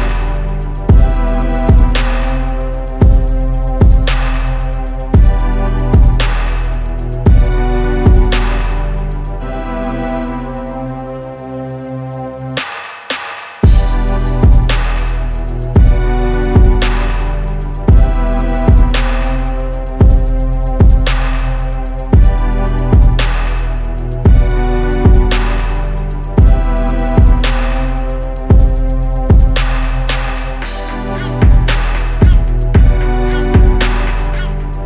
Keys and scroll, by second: 18.1 ctrl+z, 22.3 ctrl+z, 22.8 ctrl+z, 26.3 ctrl+z.